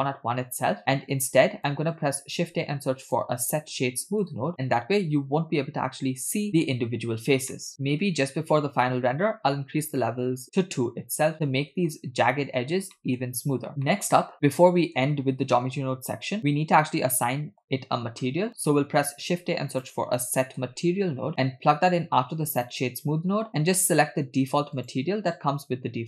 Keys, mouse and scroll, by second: 1.3 click, 2.2 shift+a, 7.5 middle click, 7.7-8.9 scroll up 3, 11.4-11.9 shift+middle drag, 12.5 scroll up 2, 13.0 shift+middle click, 13.9 middle click, 15.9-16.4 scroll down 3, 16.4 click, 17.1-17.7 shift+middle drag, 18.2 shift+middle drag, 19.1 shift+a, 23.5 middle click, 23.9-26.0 drag.